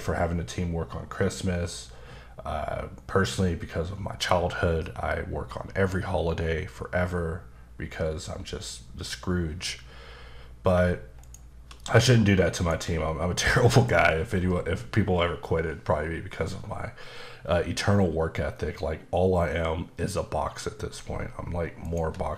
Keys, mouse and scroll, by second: 11.2 shift+right click, 12.6 shift+right click, 21.8 shift+double right click.